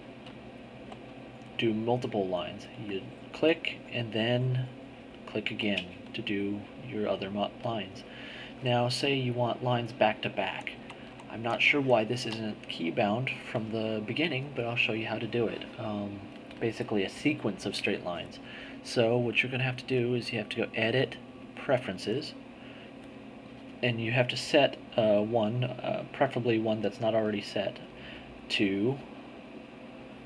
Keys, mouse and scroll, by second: 0.0-1.2 drag, 2.8 click, 4.8 shift+click, 10.4 z, 21.3 click, 28.2 click, 29.0-30.2 drag.